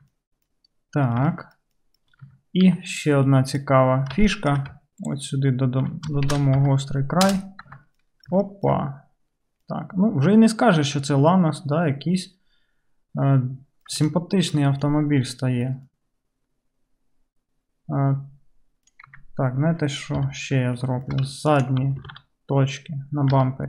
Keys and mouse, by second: 0.0 Tab, 0.0-0.5 right drag, 0.2 click, 0.5-3.1 drag, 2.3 Tab, 3.1-4.5 middle drag, 4.3 shift+right click, 4.5 shift+right click, 4.7 shift+middle click, 4.7 right click, 4.8-8.4 ctrl+drag, 6.3 shift+e, 7.7 Tab, 8.4-10.7 shift+middle drag, 10.7-16.2 right drag, 16.2-16.6 middle drag, 16.3 right click, 16.6-20.5 right drag, 19.2 Tab, 20.2 KP_3, 20.5-21.7 shift+drag, 21.7 alt+middle click.